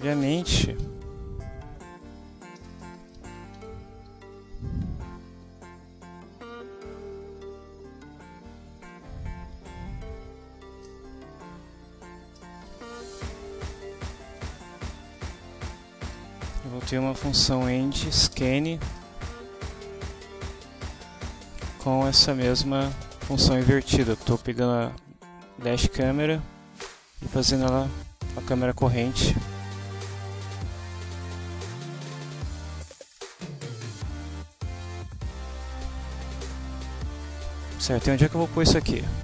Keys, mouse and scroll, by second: 0.6 ctrl+shift+Return, 0.8 ctrl+shift+v, 1.2 ctrl+shift+Left, 2.6 ctrl+shift+BackSpace, 3.2 ctrl+shift+e, 3.3 ctrl+shift+n, 3.6 ctrl+shift+d, 4.1 ctrl+shift+Down, 4.5 Up, 6.3 Down, 8.9 Tab, 9.6 a, 10.8 Return, 11.9-16.2 typing, 16.2 shift+Right, 16.7 shift+Left, 18.3 Return, 19.0 BackSpace, 22.5-23.5 drag, 23.6 click, 27.9 click, 30.4 click, 32.2 click, 34.0 click.